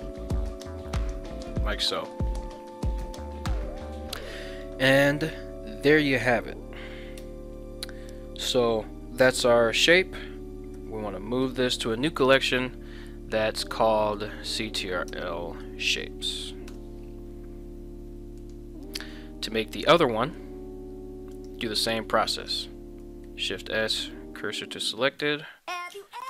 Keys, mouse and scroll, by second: 0.5 click, 1.0 middle click, 1.8 middle click, 3.0 KP_1, 7.2 Tab, 10.8 m, 20.2 shift+middle click, 21.3 right click, 22.0 ctrl+Tab, 22.4 right click, 23.2 shift+s, 25.2 Tab.